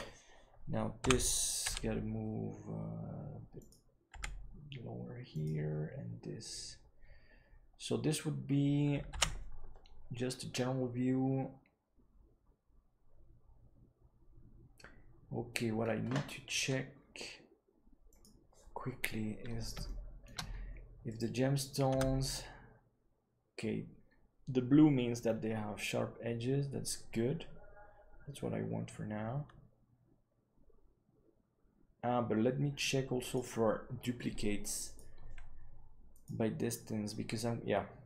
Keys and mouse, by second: 18.1 click, 19.8 shift+middle click, 22.1 Tab, 33.2-36.9 drag.